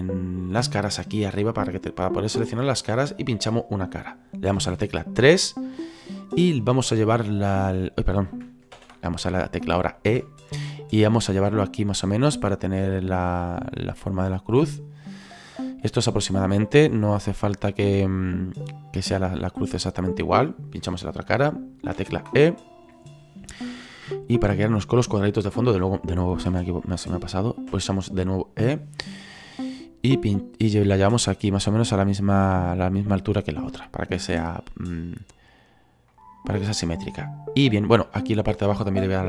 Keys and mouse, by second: 1.2 click, 3.2 right click, 4.6 KP_3, 7.3 click, 8.7 ctrl+z, 10.1 e, 18.4 click, 18.9 middle click, 19.8 right click, 22.0 KP_3, 24.5 click, 26.5 ctrl+z, 27.7 e, 33.2 click, 34.8 middle click, 36.1 middle click, 38.3 right click.